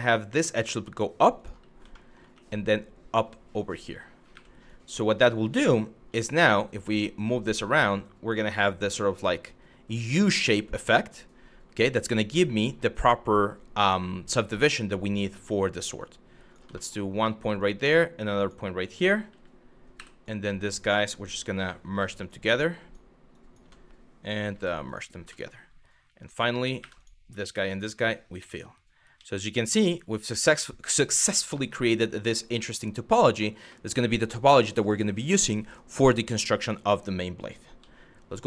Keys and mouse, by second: 1.0 click, 1.5 shift+middle click, 2.0 e, 3.3 click, 3.9 1, 4.4 click, 5.0 click, 5.7 g, 6.5 click, 7.1 click, 7.1 g, 7.8 click, 8.8 click, 14.1 shift+middle click, 15.0 click, 15.6 click, 16.4 shift+middle click, 17.2 click, 19.6 w, 19.9 click, 21.5 m, 22.4 click, 23.0 click, 23.2 n, 24.1 m, 25.0 shift+middle click, 26.4 2, 26.6 click, 28.0 f, 30.4 click, 31.2 middle click, 33.4 shift+middle click, 37.4 z.